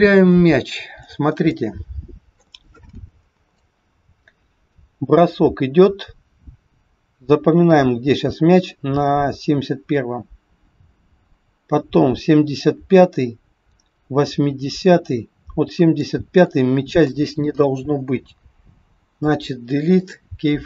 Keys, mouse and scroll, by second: 0.4 click, 1.4 shift+middle click, 3.6 click, 16.4 click, 18.4 Delete.